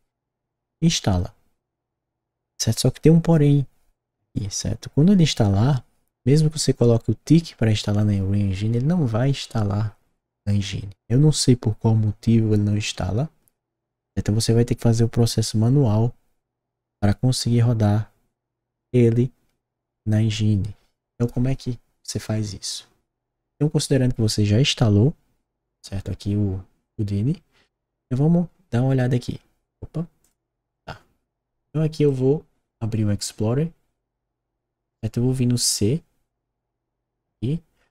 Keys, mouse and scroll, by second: 30.2 click, 32.0-34.8 drag.